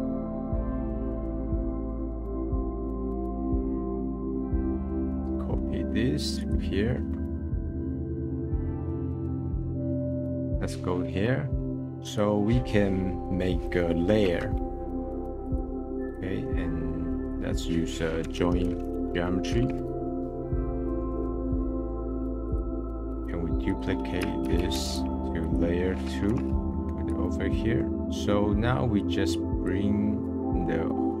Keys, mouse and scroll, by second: 0.6-1.4 drag, 1.5 middle click, 1.8 click, 1.9 scroll down 3, 2.3 middle click, 2.4 scroll up 8, 2.6 middle click, 2.9-4.0 drag, 4.0 middle click, 4.5 scroll down 1, 4.6 middle click, 4.9-5.2 scroll up 2, 5.0 middle click, 5.2 scroll down 10, 5.3 middle click, 5.9-6.3 scroll up 4, 6.3 click, 7.0-7.5 scroll down 5, 7.5 middle click, 7.6 scroll up 4, 7.8 ctrl+v, 7.9 click, 8.1 middle click, 8.4 middle click, 8.6 scroll up 5, 8.7 middle click, 8.9 click, 9.1 middle click, 9.3 click, 9.8 middle click, 10.0 click, 10.1 scroll up 2, 10.2 middle click, 11.5 middle drag, 11.8 shift+a, 14.8 Down, 16.0 click, 16.3 shift+a, 19.8 BackSpace, 23.1 click, 23.7-24.5 drag, 24.5 shift+d, 25.4-27.2 drag, 27.2 scroll down 4, 27.5 middle click, 28.1-29.0 middle drag, 29.0 click, 30.2 click, 30.4-31.2 middle drag.